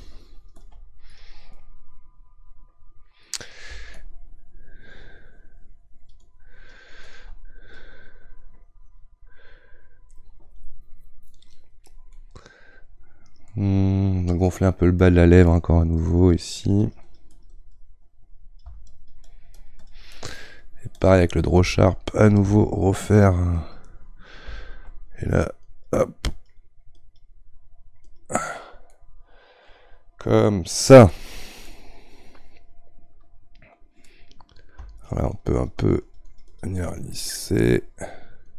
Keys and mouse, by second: 1.5-3.9 middle drag, 3.9-12.2 shift+drag, 12.2-15.1 middle drag, 15.1-28.9 drag, 28.9-35.0 middle drag, 35.0-37.3 shift+drag, 37.3-38.4 middle drag, 38.4-38.5 drag.